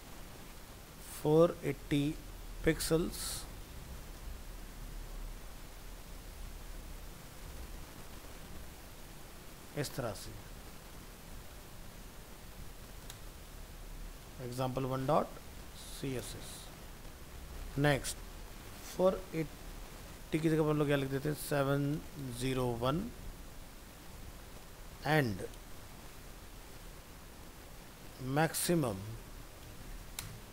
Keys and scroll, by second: 3.4 ctrl+shift+Left, 4.2 ctrl+x, 6.3 ctrl+Left, 6.4 ctrl+v, 11.5 ctrl+shift+Left, 15.8 ctrl+c, 16.6 ctrl+v, 21.1 ctrl+shift+Left, 27.8 ctrl+?, 30.3 ctrl+v.